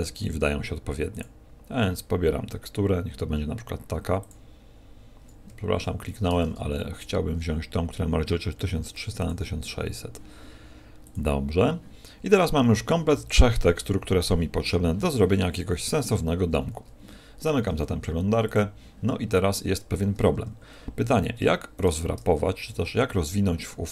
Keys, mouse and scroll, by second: 20.3 Tab, 20.9 a, 21.3 Tab, 21.7 right click, 23.3 middle click.